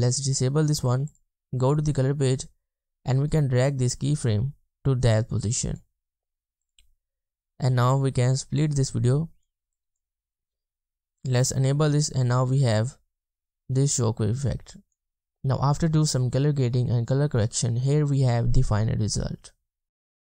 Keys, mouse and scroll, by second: 11.9 space, 14.4 space.